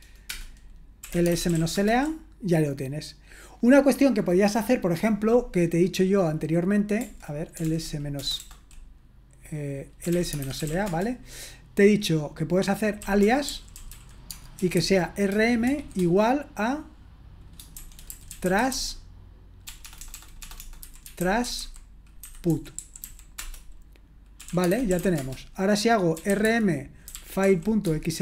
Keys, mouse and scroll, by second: 0.0-2.0 typing, 7.3-8.2 typing, 9.8-11.1 typing, 12.8-15.7 typing, 17.8-28.2 typing.